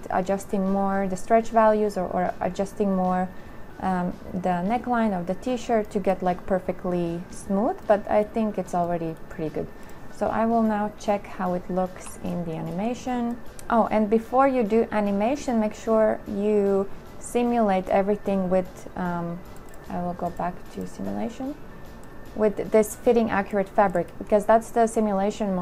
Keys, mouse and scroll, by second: 12.2 2.